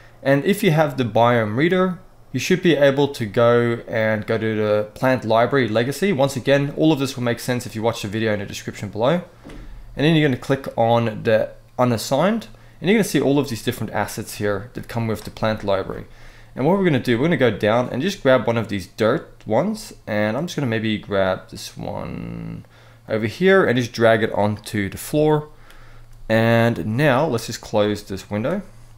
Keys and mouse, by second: 2.8-5.2 drag, 7.3-9.1 drag, 27.9 click.